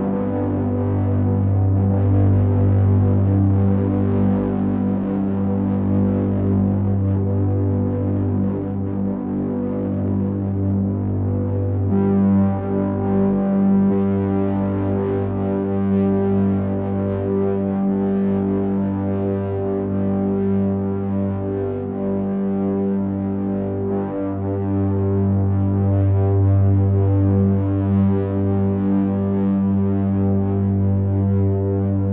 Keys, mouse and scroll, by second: 0.8 Tab, 7.8 click, 9.3 middle click, 15.1 click, 15.7 click, 19.3 click, 21.7 click.